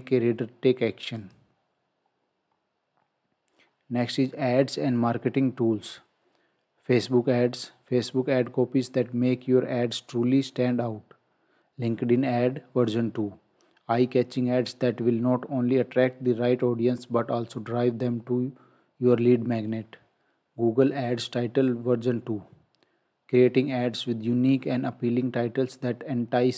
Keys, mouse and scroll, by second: 1.2 click, 2.5 scroll down 1.